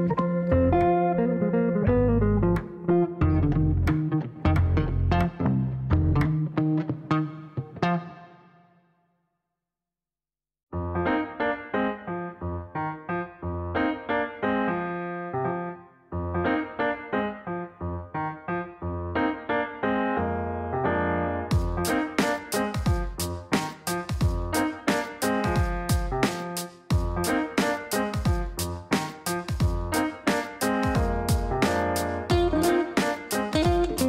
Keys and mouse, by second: 5.6 click, 13.7 click, 15.7 click, 16.5 right click, 18.1 click, 23.0 click, 25.6 click, 26.9 click, 27.1 click, 28.5 click, 30.4 click, 33.5 click.